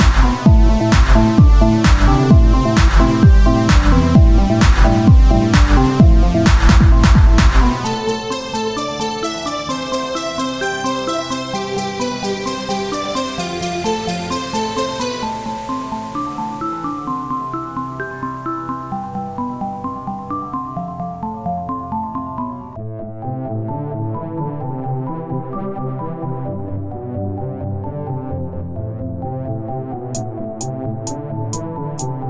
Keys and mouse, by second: 1.1-2.2 drag, 2.7-3.8 drag, 4.0 Tab, 5.8 KP_1, 9.6 z, 12.9 z, 13.1 shift+a, 14.8 s, 16.5-18.1 drag, 18.1 Tab, 18.6 ctrl+Tab, 19.1 z, 19.5 z, 20.7 click, 23.1 a, 24.3 a, 24.3 shift+d, 26.6-27.7 drag, 27.7 e, 30.7-31.7 drag, 31.7 w.